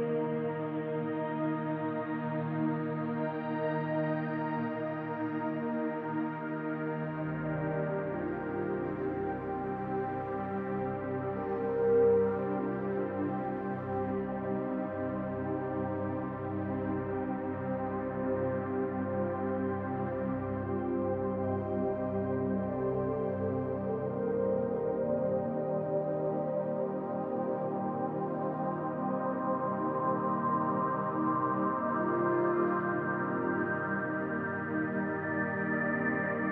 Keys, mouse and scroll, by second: 0.2 m, 1.1 scroll down 1, 1.4 middle click, 4.6 middle click, 6.5 click, 7.2 click, 7.6 middle click, 9.0 f, 9.5-9.9 scroll down 2, 9.8 middle click, 11.1 click, 11.5 f, 12.0 middle click, 12.5 Tab, 12.8-13.3 scroll down 3, 13.2 middle click, 15.3 middle click, 16.0-16.5 scroll up 1, 16.5 Tab, 16.5-18.2 scroll up 1, 18.2 click, 18.5 middle click, 20.0 middle click, 20.1-20.9 scroll up 2, 20.9 click, 21.3 middle click, 22.2 click, 22.6 middle click, 23.4 shift+click, 23.9 middle click, 25.0 shift+click, 26.0 shift+click, 26.5 shift+click, 26.8 middle click, 27.6 shift+click, 28.1 shift+middle click, 28.8 middle click, 29.5 shift+click, 29.9 middle click, 32.4 click, 34.0 middle click, 34.8 click, 35.5 middle click.